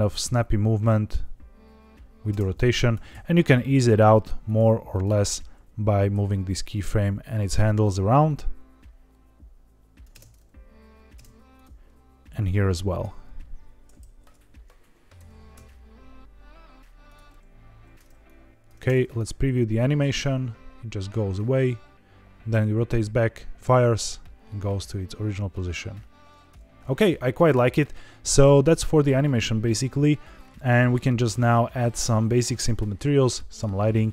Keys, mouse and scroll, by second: 2.2 space, 2.5 click, 2.9 g, 3.0 x, 4.4-5.0 drag, 5.2 g, 5.6 y, 6.1 x, 7.4 click, 8.0-9.9 drag, 10.1 space, 11.1 space, 11.5 click, 12.3 click, 13.0 h, 13.9 ctrl+z, 15.1 g, 15.4 x, 17.0 click, 18.2-18.6 drag, 18.7 space, 26.8 space, 27.8 scroll up 2, 28.2-29.3 scroll down 2.